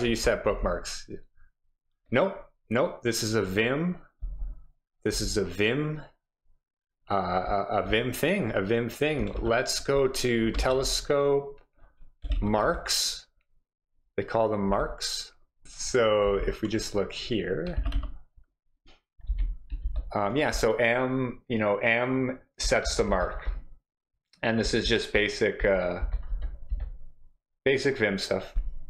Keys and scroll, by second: 0.0 j, 0.5 k, 4.2 j, 5.1 k, 9.4 super+f, 10.3-13.1 typing, 14.7 k, 15.6 ctrl+w, 15.6 shift+l, 16.2 j, 17.7 z, 17.9 z, 19.2-26.8 typing.